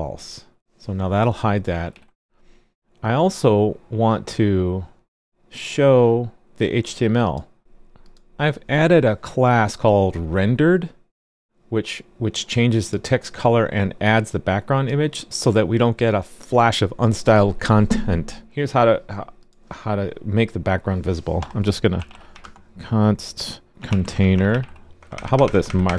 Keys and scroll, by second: 1.9 super+s.